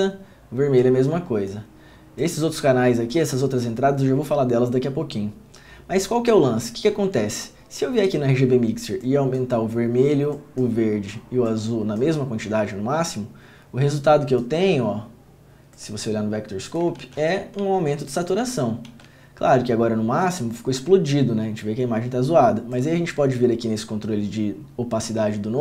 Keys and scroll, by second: 17.7 ctrl+d, 18.6 ctrl+d, 19.0 ctrl+d.